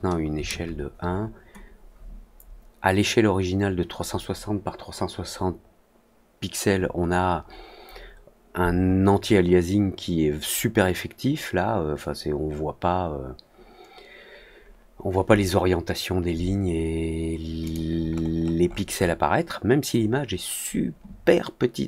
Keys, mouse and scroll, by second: 17.6 click, 18.0 middle click, 18.6 middle click, 18.9 middle click.